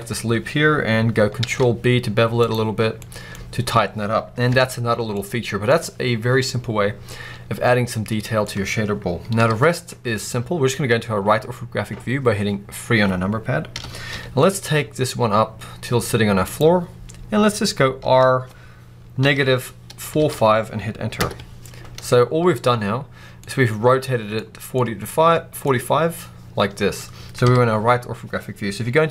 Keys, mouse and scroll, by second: 0.0-1.3 scroll up 1, 1.3 ctrl+b, 2.4 click, 2.6-2.9 scroll down 1, 2.9 middle click, 3.1-4.2 scroll up 1, 4.4 Tab, 4.7-5.1 scroll down 1, 5.1 middle click, 7.9-16.5 middle drag, 9.2 KP_3, 13.6 g, 16.5 click, 17.9 r, 21.1 Return, 23.2-29.1 middle drag, 24.3-24.6 scroll down 2, 27.3 KP_3.